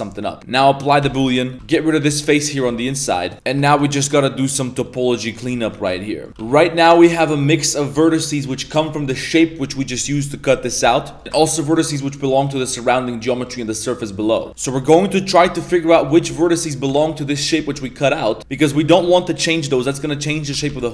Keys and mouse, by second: 1.2 ctrl+a, 1.5 z, 2.0 z, 2.3 right click, 2.6 x, 3.3 middle click, 3.6 shift+middle click, 3.9 middle click, 4.6 middle click, 5.1 middle click, 5.5 shift+middle click, 5.9 middle click, 6.3 1, 7.0 a, 7.0 alt+right click, 7.4 middle click, 8.4 middle click, 11.0 middle click, 11.2 ctrl+z, 11.2 2, 11.6 shift+right click, 12.1 shift+right click, 12.8 shift+right click, 14.2 shift+right click, 14.6 shift+middle click, 15.0 middle click, 15.4 2, 15.5 right click, 15.9 right click, 16.2 right click, 16.9 ctrl+z, 17.5 1, 18.8 g, 20.5 ctrl+z.